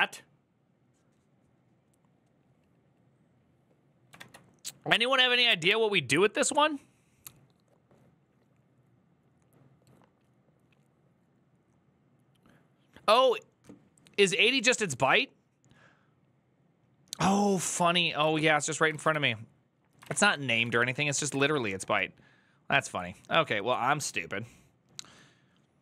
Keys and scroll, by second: 18.0 alt+{, 18.7 ctrl+a, 18.9 2, 19.8 ctrl+a, 20.0-23.1 typing.